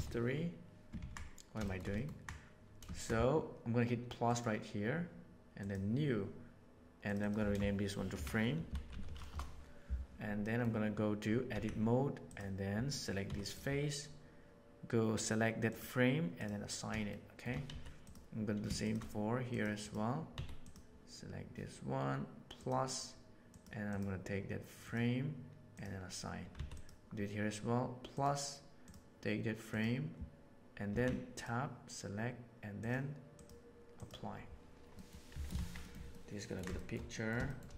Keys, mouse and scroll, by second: 1.0 ctrl+z, 1.9 ctrl+click, 4.2 right click, 5.5 click, 7.0 click, 7.1-8.8 drag, 10.4 middle click, 11.4 Tab, 12.2 click, 13.2 3, 15.6 click, 16.3 click, 17.0 shift+middle click, 17.6 Tab, 18.8 shift+click, 19.7 click, 22.5 click, 23.9 click, 25.6 click, 26.5 Tab, 28.8 click, 30.8 Tab, 32.7 click, 33.3 click, 33.9 click, 34.8 middle click, 35.2 Tab, 35.5 alt+a, 35.7 middle click, 36.0-36.5 ctrl+middle drag, 36.7 shift+middle click, 37.0 middle click, 37.4 shift+middle click.